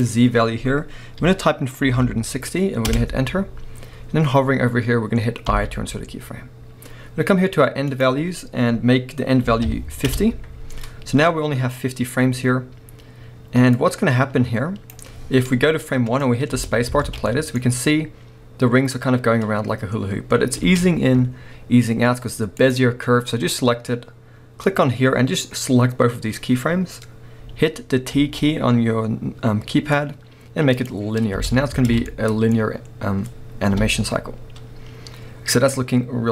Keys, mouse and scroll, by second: 3.0 Return, 5.5 i, 10.2 Return, 11.3-13.7 middle drag, 11.7-13.7 scroll down 2, 13.7-15.8 drag, 15.8-22.6 middle drag, 17.0 alt+a, 17.5-18.6 scroll up 1, 20.6 space, 22.6-33.5 drag, 28.2 t, 31.4 space, 31.9 alt+a, 33.5-36.3 middle drag, 33.7 KP_7.